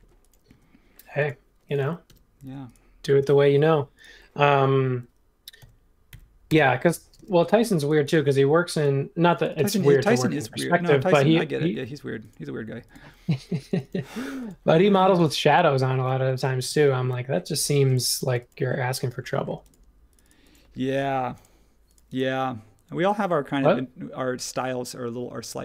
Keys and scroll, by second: 0.5 super+1, 2.0 m, 5.6 x, 6.1 x, 6.5 Return, 7.1 space, 11.8 space, 16.6 super+z, 17.7 space, 19.4 space.